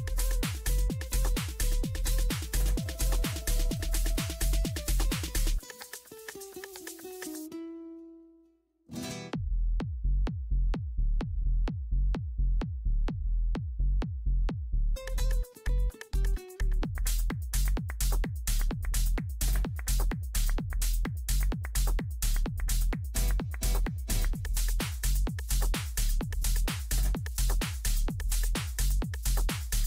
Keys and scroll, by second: 13.5 ctrl+v.